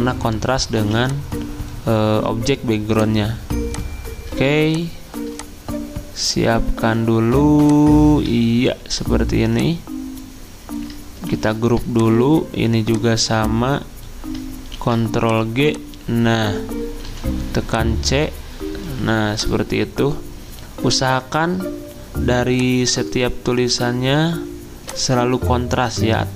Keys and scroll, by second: 0.8 z, 11.3 ctrl+g, 14.7 ctrl+g, 17.1 c, 21.6 c.